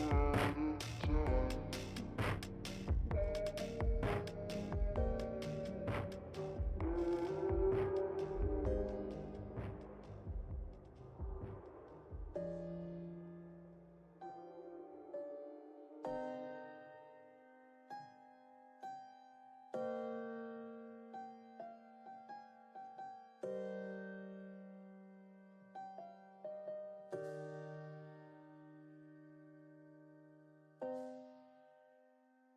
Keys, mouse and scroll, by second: 0.9 shift+middle click, 1.1 scroll down 1, 1.1 scroll up 4, 1.3 s, 2.7 shift+middle click, 2.9-3.4 scroll up 2, 3.4 s, 4.5 g, 5.7 s, 7.7 g, 9.0 s, 10.6 g, 12.6 shift+middle click, 13.1 click, 13.2-14.0 scroll up 1, 14.0 scroll up 1, 14.1 alt+z, 14.7 ctrl+t, 15.2 ctrl+r, 17.2 click, 17.4 scroll down 4, 17.6-18.0 scroll up 4, 18.0 alt+click, 18.5 g, 20.1 click, 20.3 scroll down 4, 20.4-20.7 middle drag, 20.7 alt+z, 20.9-21.6 middle drag, 21.6 3, 21.8 click, 22.2-22.6 shift+middle drag, 22.6 scroll down 1, 22.7 shift+middle click, 23.3 e, 25.4 middle click, 25.6-26.7 scroll up 3, 26.7 middle click, 27.6-27.9 scroll down 1, 27.9 middle click, 28.2 scroll down 3, 28.4 middle click, 29.2 KP_3, 29.5 shift+middle click, 29.6 scroll up 2, 29.9 alt+z, 30.1 shift+middle click, 30.3-31.3 scroll up 1, 31.3 scroll down 1, 31.5 middle click, 31.8 alt+z, 32.1 3, 32.2 click.